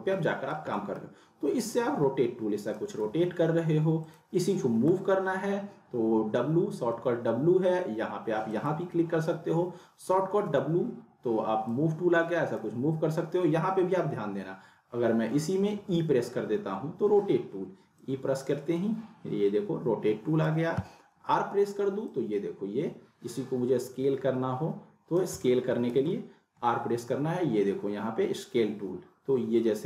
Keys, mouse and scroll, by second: 1.8-2.9 click, 3.0 z, 4.0 click, 4.8 w, 6.9 w, 8.5 click, 10.4 w, 11.8-12.7 drag, 15.8 e, 17.2 e, 18.0-20.6 drag, 21.1 r, 22.1-25.2 drag, 26.0 ctrl+z.